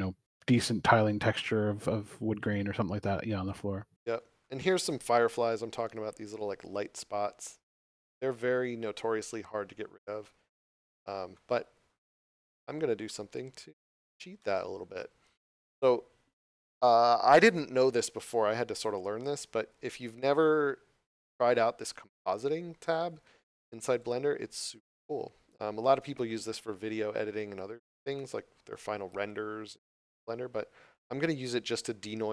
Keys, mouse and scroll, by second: 3.9 scroll up 1, 4.8 shift+middle click, 9.8 scroll down 1, 10.8 middle click, 11.6 scroll down 1, 12.1 shift+middle click, 13.3 scroll down 1, 14.3 scroll up 1, 14.4 middle click, 23.9 click.